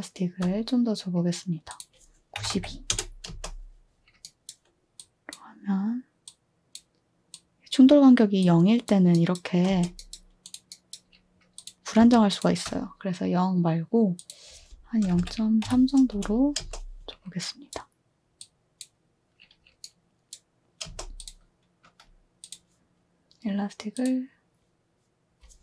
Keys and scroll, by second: 2.1-3.3 typing, 9.7 space, 14.7-16.6 typing, 16.1 Return, 17.7 typing, 20.2-20.8 typing.